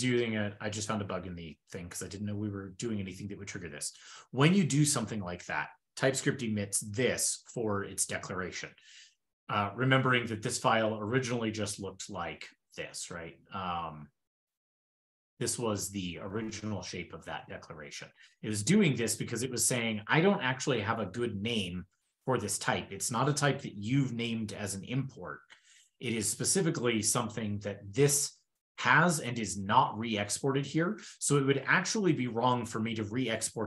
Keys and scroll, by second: 10.0 super+Left, 10.6 super+Left, 11.2 super+c, 11.5 super+n, 11.7 super+v, 12.8 ctrl+shift+l, 26.8 shift+super+[, 26.9 shift+super+[.